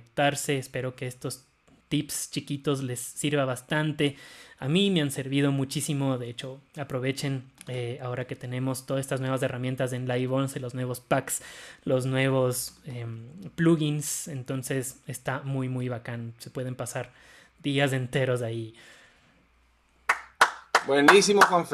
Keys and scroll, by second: 8.1 alt+super+b, 13.0 alt+super+b.